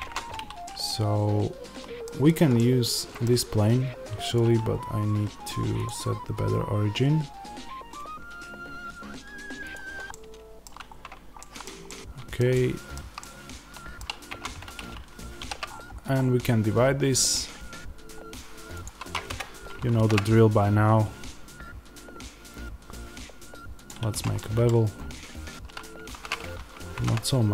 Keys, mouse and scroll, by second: 0.6-2.1 middle drag, 2.1 click, 2.4-9.6 middle drag, 9.6 right click, 10.0-23.7 middle drag, 10.8-11.3 scroll, 14.2 Tab, 15.3 ctrl+r, 19.3 Escape, 23.7 click, 24.3-25.9 middle drag, 24.6 scroll, 25.9 ctrl+z.